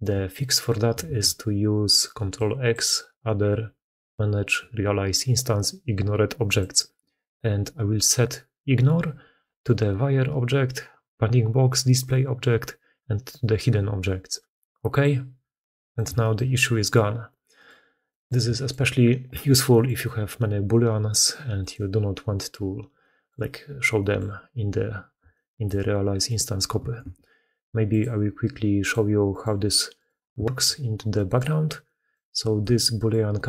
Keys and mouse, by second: 0.1 middle drag, 0.9 ctrl+x, 15.6 drag, 15.8-17.4 shift+middle drag, 17.5-17.9 middle drag, 18.1-19.5 shift+middle drag, 19.7-22.8 middle drag, 23.8 middle click, 25.1-25.5 shift+middle drag, 26.1 middle click, 26.8 ctrl+x, 30.3 shift+middle drag, 31.0 middle drag, 31.7-32.1 middle drag, 32.5 g.